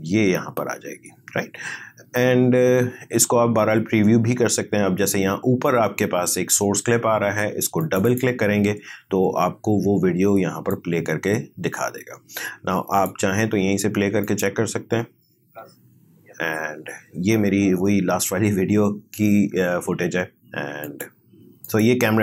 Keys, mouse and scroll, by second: 7.8 click, 10.7-14.2 drag, 20.8 click.